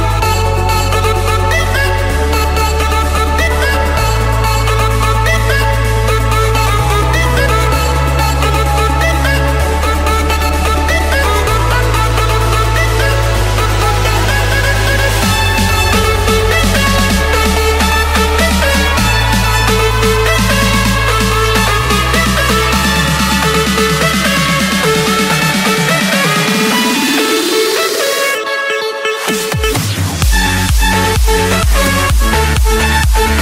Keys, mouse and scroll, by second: 3.0 l, 3.2 Return, 5.0 click, 6.2-6.5 typing, 6.8 Return, 8.5 click, 8.9 Escape, 9.5-10.4 typing, 11.0 Return, 11.3 Return, 12.1 click, 12.8 click, 13.4 click, 13.9 click, 14.2 Escape, 14.7 click, 15.1 click, 16.1 j, 16.4 Return, 17.6 Escape, 19.0 l, 19.7 Return, 23.7 typing, 24.3 Return, 26.8 click, 27.7 click, 29.2 click, 32.4 click.